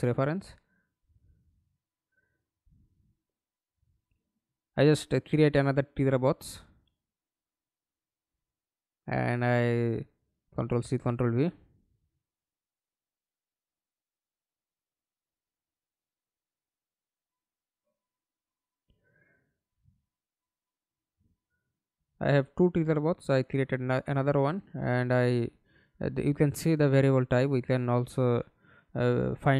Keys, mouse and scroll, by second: 6.5 right click, 8.7 right click, 9.1 ctrl+c, 10.0 ctrl+v, 14.8 right click, 26.1 right click, 27.8 right click.